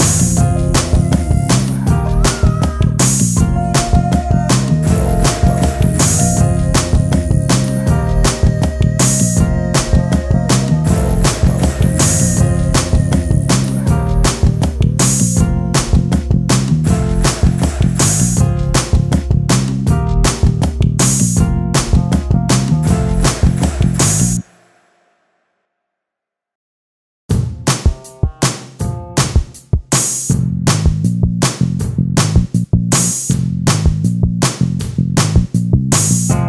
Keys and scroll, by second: 9.2 ctrl+space.